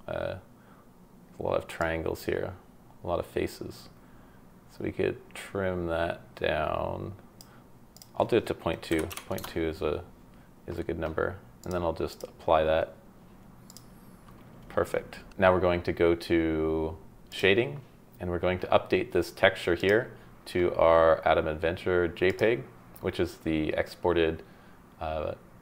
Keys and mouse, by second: 1.8-7.5 drag, 8.1-9.5 drag, 11.6-12.3 drag.